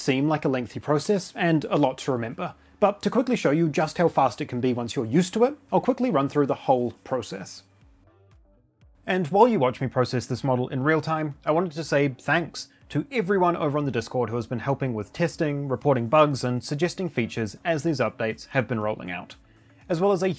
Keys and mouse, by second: 8.3 n, 9.0 click, 9.8 click, 10.9 click.